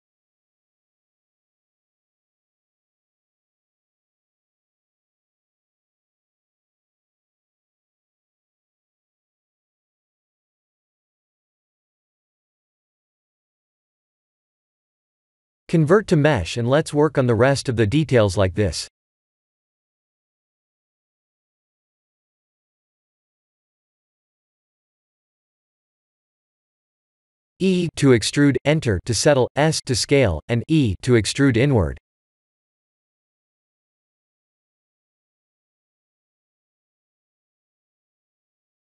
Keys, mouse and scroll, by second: 2.7 Tab, 3.1 middle click, 3.9 middle click, 4.3 Tab, 4.7 middle click, 6.0 click, 6.7 middle click, 6.7 middle click, 7.9 g, 9.2 Tab, 9.5 middle click, 9.7 middle click, 12.5-13.1 scroll down 4, 13.1 middle click, 13.2 middle click, 14.1 middle click, 14.1 middle click, 14.4 middle click, 15.6 middle click, 16.5 click, 17.9 right click, 20.2 Tab, 20.9 3, 21.2 2, 21.9 alt+click, 22.6 middle click, 23.2 middle click, 26.9 ctrl+z, 27.9 e, 28.3 s, 31.9 KP_1, 32.4 shift+z, 32.8-34.4 scroll up 4, 34.4 e, 37.4 s.